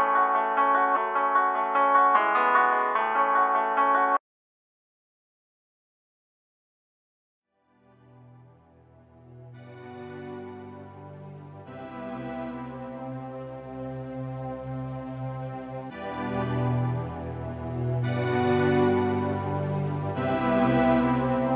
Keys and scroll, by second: 0.9 ctrl+z.